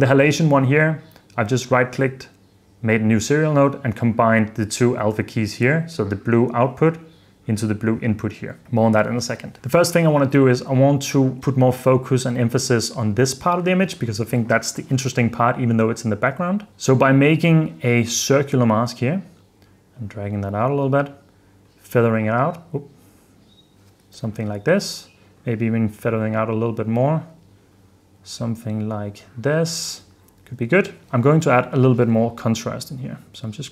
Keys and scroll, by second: 24.2 h, 30.5 h.